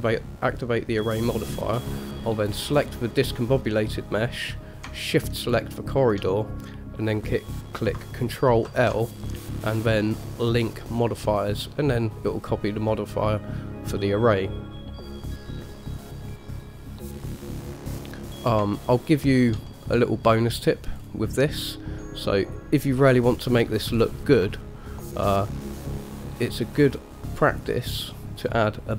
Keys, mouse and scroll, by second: 2.7 click, 5.6 shift+click, 8.9 ctrl+l, 13.1-13.5 middle drag, 17.9 click, 18.5-19.1 scroll up 2, 19.1-19.7 shift+middle drag, 19.9-20.5 middle drag, 21.2-21.9 scroll down 1, 21.9-22.9 middle drag, 21.9 scroll down 1, 24.1-24.6 scroll up 2, 24.8-25.3 shift+middle drag, 25.6 middle click, 27.0 click.